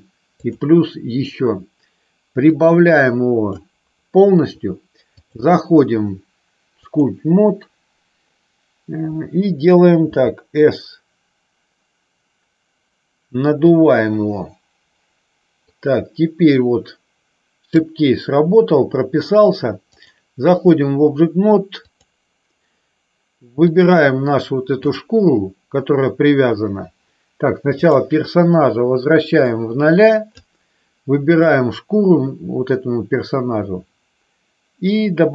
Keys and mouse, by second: 0.7 click, 2.6-3.6 drag, 5.3-7.5 drag, 10.3 s, 13.8 click, 15.8-17.8 drag, 20.1-22.2 drag, 23.7 click, 27.8 click, 29.7 click, 31.6 click.